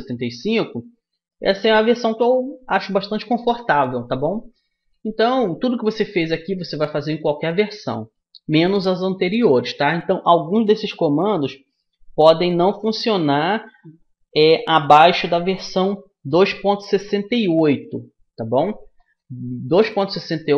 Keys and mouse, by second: 0.6-20.5 middle drag.